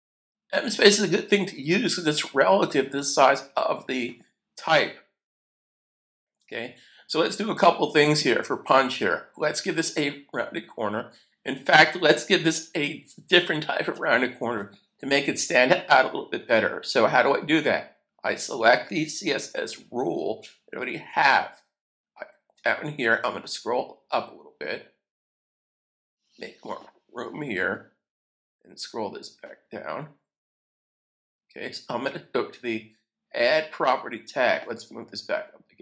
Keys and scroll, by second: 5.6 super+s.